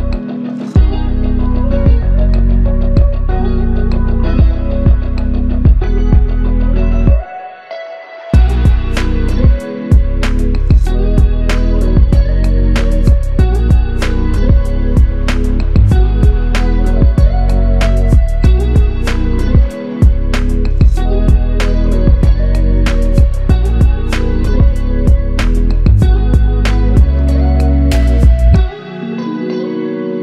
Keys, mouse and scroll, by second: 11.7 typing, 13.7 Return, 17.0 typing, 17.9 Return, 21.0 typing, 22.5 Return.